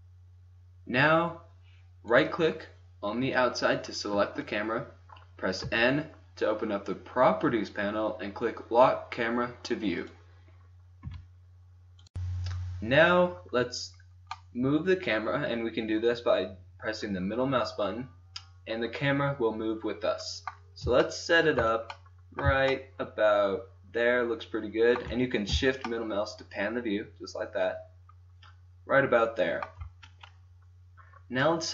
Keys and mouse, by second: 2.1-4.6 drag, 5.6 n, 9.9-11.0 drag, 11.0 n, 11.5 click, 14.3-16.9 middle drag, 19.5 middle click, 21.1-24.9 middle drag, 29.2-31.7 middle drag.